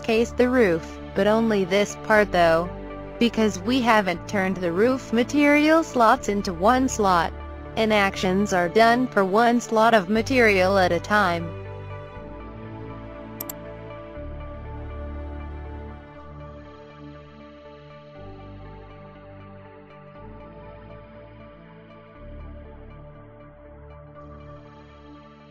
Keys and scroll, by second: 13.9 o, 15.1 f, 17.8 a, 18.4 d, 18.9 e, 20.4 space.